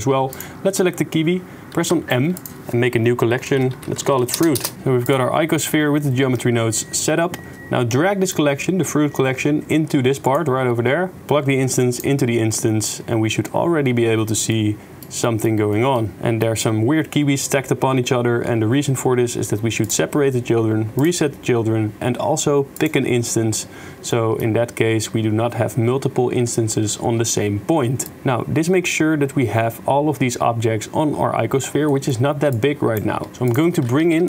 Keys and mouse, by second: 1.8 m, 4.5 Return, 8.3 click, 10.6 middle click, 11.2-12.0 drag, 12.0 middle click, 12.6 click, 14.6 click, 14.6-15.0 middle drag, 15.2 middle click, 15.8 shift+middle click, 16.1 shift+middle click, 18.1 middle click, 18.6 middle click, 19.8 click, 21.0 click, 22.8 click, 23.7 middle click, 24.1 shift+middle click, 31.9 click, 32.6 click, 33.4 click, 33.7 shift+a.